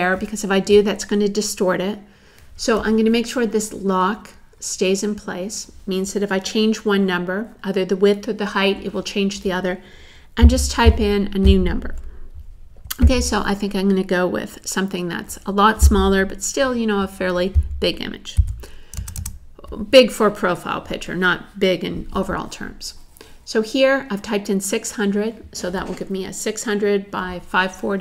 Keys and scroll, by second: 18.4 6, 19.0 0.